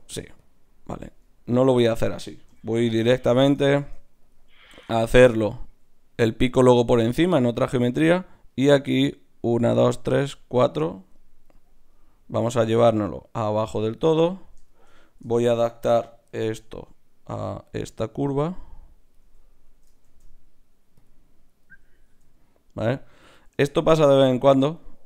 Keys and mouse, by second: 0.0 ctrl+Tab, 0.8-2.5 drag, 2.5 x, 3.8 ctrl+Tab, 4.7 click, 12.5 e, 17.7 d, 17.8-20.0 drag, 20.0 shift+q, 22.0 z.